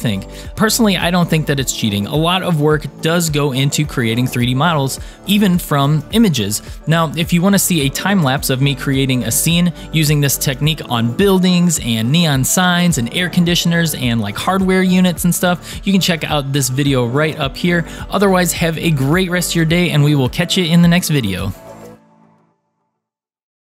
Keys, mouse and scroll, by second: 0.4-3.1 middle drag, 4.4-6.0 middle drag, 6.9-7.5 scroll down 2, 7.5-8.3 middle drag, 7.9 click.